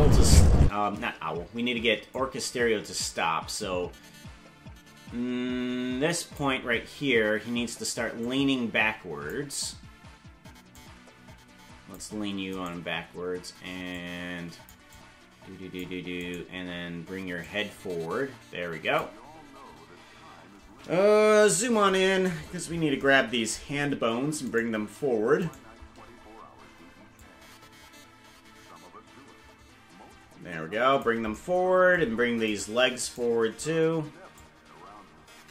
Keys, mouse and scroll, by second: 0.6 space, 2.2-6.4 drag, 8.2-9.3 drag, 10.7-12.0 drag, 12.8 right click, 13.9 click, 14.9 click, 16.4 right click, 17.4-19.0 drag, 21.3 KP_Decimal, 22.4-22.8 scroll down 12, 24.7 right click, 25.6 shift+right click, 27.1-31.1 shift+drag, 32.7 right click, 34.3-35.5 drag.